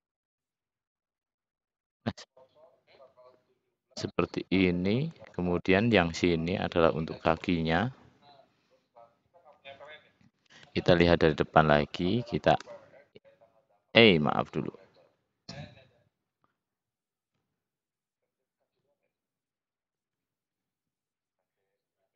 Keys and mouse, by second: 0.2 s, 4.2 middle click, 5.1 shift+click, 6.5 shift+click, 7.3 middle click, 9.8 middle click, 10.0 middle click, 12.5 e, 16.5 ctrl+z, 19.7 shift+click, 20.3 `.